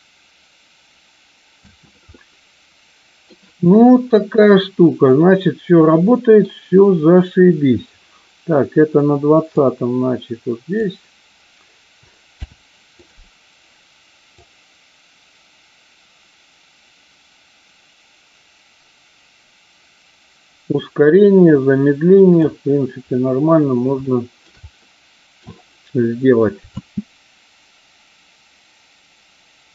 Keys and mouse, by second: 1.5 space, 2.1-3.2 middle drag, 5.0-6.5 middle drag, 9.5-10.9 drag, 14.2-22.5 drag, 24.0 shift+middle click, 24.9 middle click, 26.6 space.